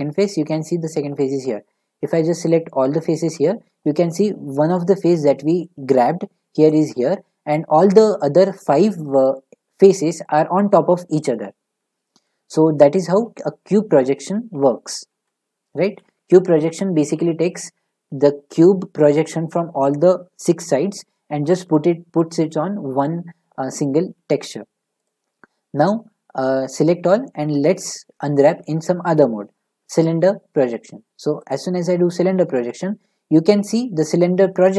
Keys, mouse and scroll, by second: 2.5 a, 2.7-4.0 drag, 5.3-5.6 drag, 14.0 ctrl+z, 14.5 ctrl+z, 15.1 ctrl+z, 16.0 ctrl+z, 25.1-26.6 drag, 26.6 a, 27.6 u, 28.1-29.1 drag, 31.5 click, 32.6 scroll, 34.6-34.7 middle drag.